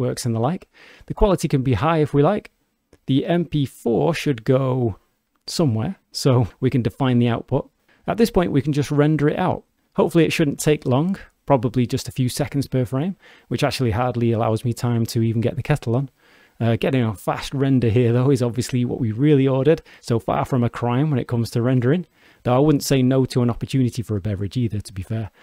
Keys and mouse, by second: 2.1 click, 10.2-11.2 drag.